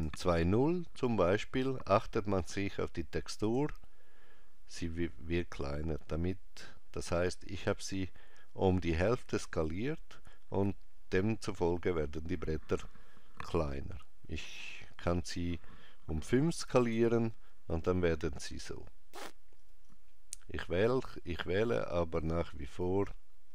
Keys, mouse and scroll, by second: 15.2 click, 19.6 click.